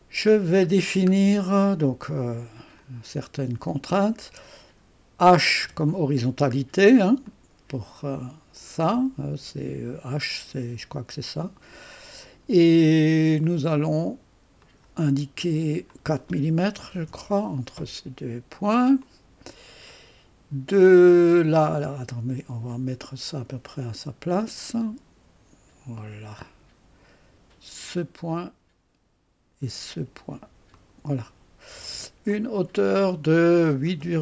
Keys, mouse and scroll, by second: 0.8-2.8 scroll down 2, 2.8 click, 4.0 click, 4.5 click, 7.3-9.2 drag, 13.4 click, 14.6 click, 15.9 click, 17.1 Return, 19.0-20.4 drag, 21.5-27.4 drag, 28.3 click, 30.7 click, 32.3 click.